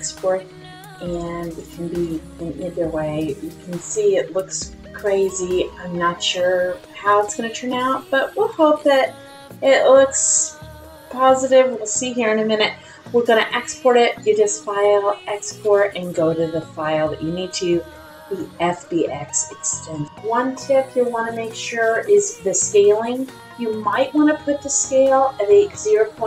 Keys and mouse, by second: 10.5-16.4 drag.